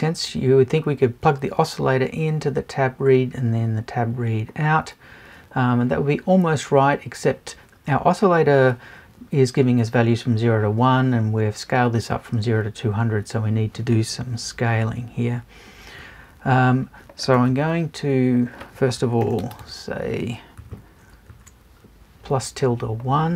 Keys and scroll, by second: 20.6 Left, 21.1 shift+Left.